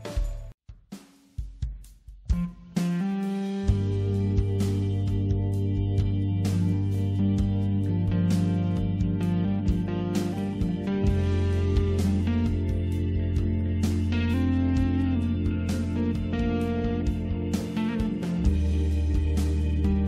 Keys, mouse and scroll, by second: 2.6 click, 9.6-10.8 scroll down 2, 11.4-12.0 scroll up 2, 12.0-13.5 scroll down 2, 14.1 click, 16.2 click, 16.2 scroll down 1.